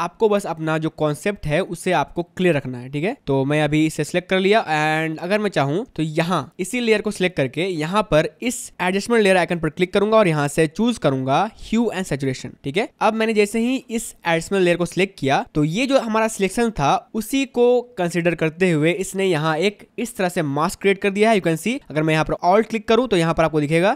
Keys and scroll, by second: 0.9 space, 5.9 space, 12.9 space.